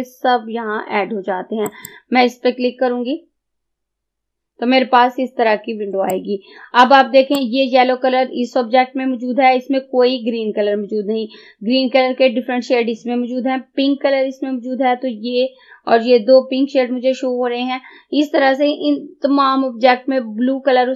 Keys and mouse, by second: 1.8 click, 6.2-20.9 drag.